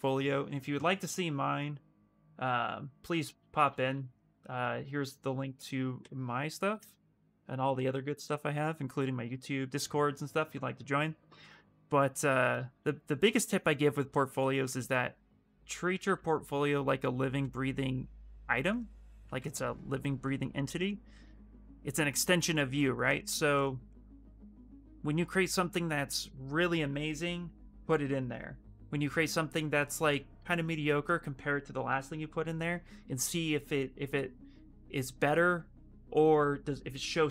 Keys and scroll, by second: 3.3 ctrl+c, 5.7 ctrl+v, 6.4 Return, 15.3-16.5 typing, 19.5 s, 21.0 s.